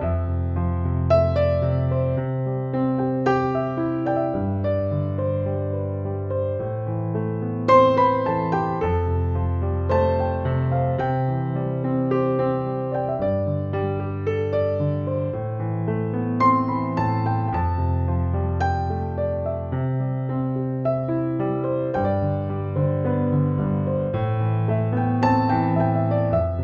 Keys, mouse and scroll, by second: 4.0-21.6 drag, 10.3-11.8 drag, 15.9-18.4 shift+drag, 21.8 click.